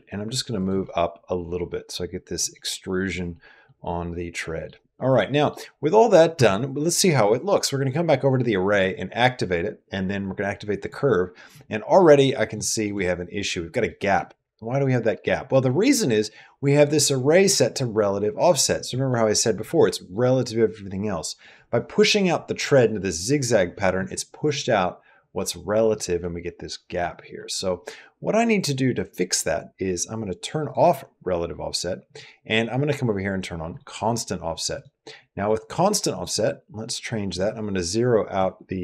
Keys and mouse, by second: 0.7-2.2 middle drag, 2.5 middle click, 3.3 middle click, 3.7 middle click, 4.9 middle click, 5.9 middle click, 6.2 Tab, 8.5 click, 10.6 click, 11.8 middle click, 12.5 shift+middle click, 12.8 middle click, 13.7 middle click, 15.3 click, 30.5 click, 33.5 click, 34.5 click, 35.9 click, 37.3-38.8 drag.